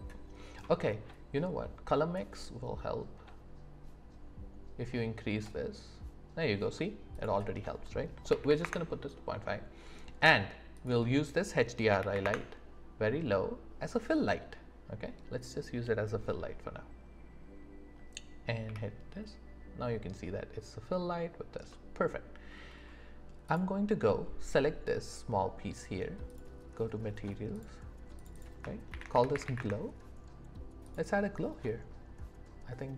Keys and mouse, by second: 28.7 shift+middle click, 29.2 click.